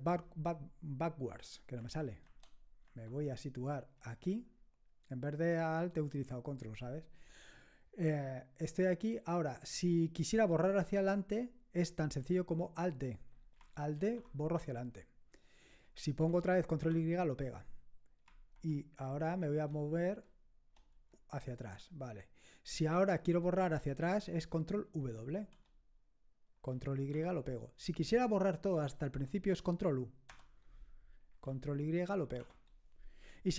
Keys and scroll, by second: 1.8 ctrl+b, 2.3 ctrl+b, 2.9 ctrl+b, 4.0 Left, 13.9 alt+d, 16.8 ctrl+y, 18.5 alt+Left, 20.0 ctrl+Left, 20.9 Left, 25.3 ctrl+w, 27.1 ctrl+y, 30.3 ctrl+u, 32.4 ctrl+y.